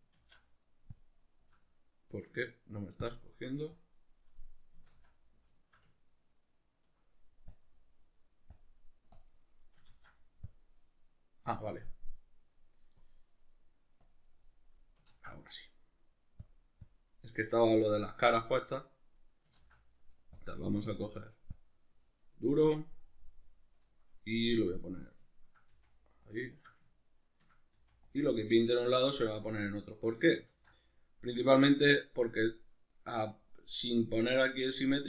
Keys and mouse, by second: 0.2 ctrl+z, 2.2 Escape, 3.0-5.2 drag, 4.9 ctrl+z, 5.2-7.5 middle drag, 7.5-25.3 drag, 9.9 ctrl+z, 15.1 ctrl+z, 19.6 ctrl+z, 25.3-26.3 ctrl+middle drag, 25.7 f, 26.3 click, 26.5-28.1 shift+middle drag, 27.7 f, 28.1 click, 30.5 ctrl+z, 30.5-35.0 drag.